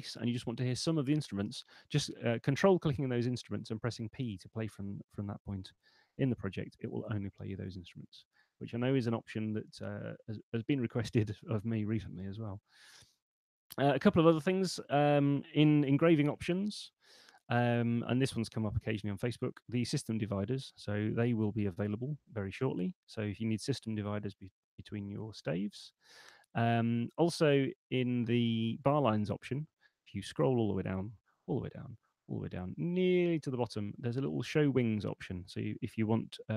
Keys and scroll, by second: 16.4 shift+super+e.